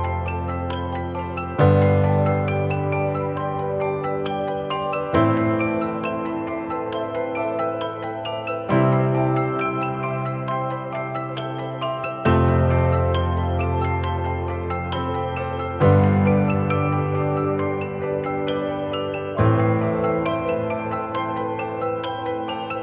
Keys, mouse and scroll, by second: 11.6-13.9 scroll down 1, 14.2-15.1 typing, 21.6 typing.